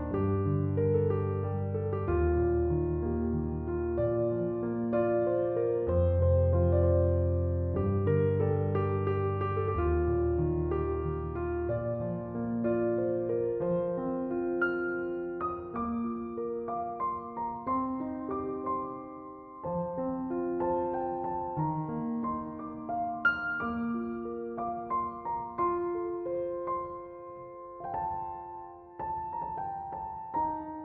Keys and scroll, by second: 9.1 space, 11.5 space, 23.3 space, 24.5 typing.